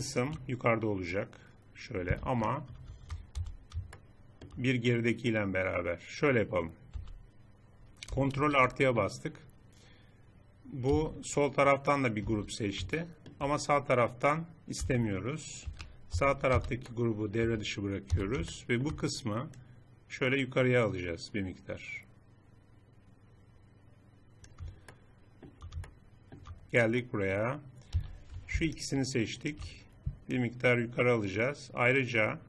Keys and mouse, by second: 2.3 click, 3.3 z, 4.0 middle click, 6.9 z, 8.3 ctrl+KP_Add, 10.9 z, 12.3 z, 14.8 c, 16.1 z, 16.5 c, 18.5 z, 24.9 middle click, 25.2 click, 26.0 middle click, 26.2-27.9 drag, 27.9 a, 28.7-32.3 drag.